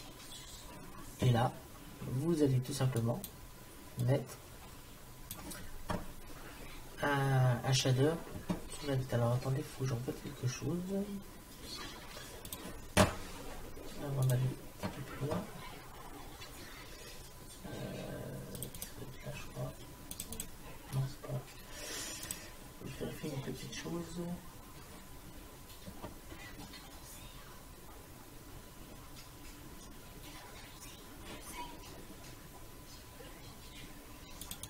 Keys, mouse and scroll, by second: 0.1-1.7 drag, 3.0 click, 4.4 click.